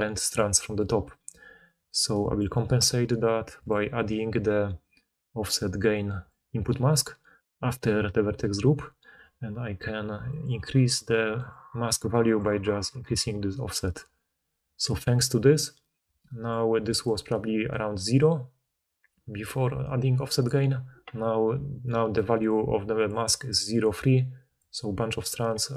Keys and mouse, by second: 16.8 d, 19.4 d, 20.2 d, 21.5-24.7 d, 25.4 d.